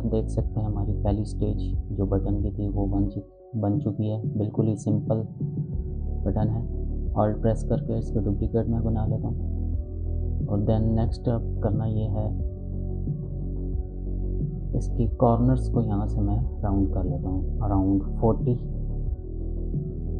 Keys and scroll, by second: 17.6-18.5 typing, 18.8 Return.